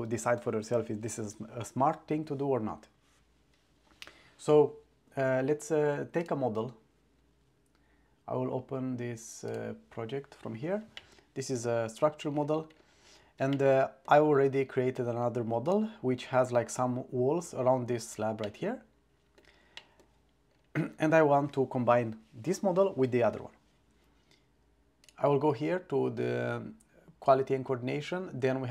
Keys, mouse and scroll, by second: 6.3-10.0 drag, 11.1-11.6 middle drag, 13.6-14.1 middle drag, 15.7 click, 18.5-19.4 drag, 19.8 middle click, 25.1 click.